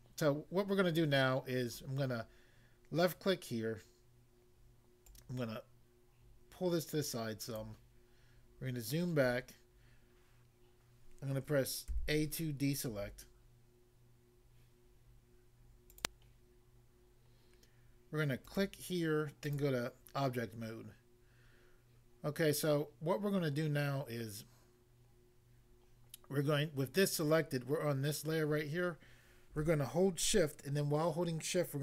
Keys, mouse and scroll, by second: 5.1 click, 7.6 click, 8.4-8.8 scroll down 1, 9.2 scroll down 1, 11.9 a, 16.0 click, 16.1 click, 18.4 click, 18.5 click, 19.5 click, 19.6 click.